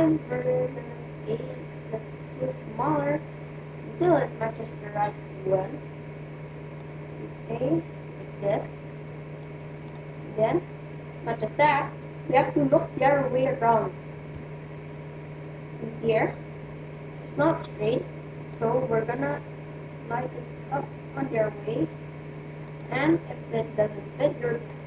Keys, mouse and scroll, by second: 0.0-1.9 drag, 9.3-10.9 drag, 14.4 KP_3, 18.6 r, 24.6-24.8 drag.